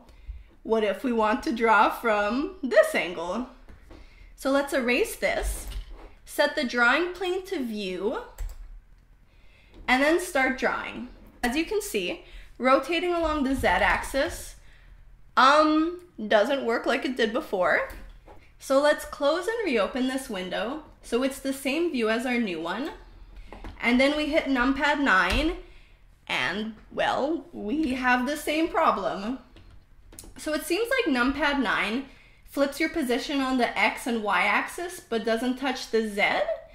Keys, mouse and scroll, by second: 1.1-4.3 middle drag, 6.1 b, 8.1-9.7 drag, 10.8-11.9 drag, 13.2 r, 18.0 ctrl+z, 19.6-21.9 right drag, 22.4-24.7 drag, 24.8 KP_9, 32.2 KP_9, 33.1 KP_9, 34.2 KP_9, 36.2-36.7 typing.